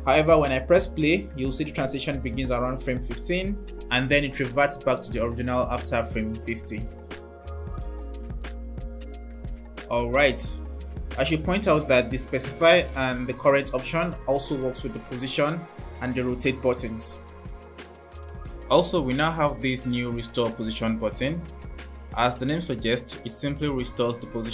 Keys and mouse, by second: 0.8 space, 4.6 space, 8.3 space.